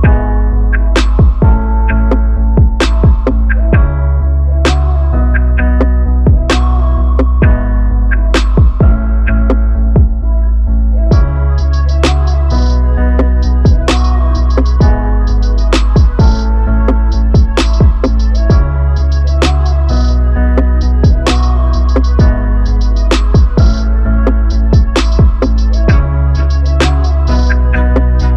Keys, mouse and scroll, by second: 0.6-1.9 drag, 5.5 right click, 7.8-8.9 drag, 12.7-15.0 drag, 20.4 Left, 20.8 r, 22.5 ctrl+z, 22.8 shift+s.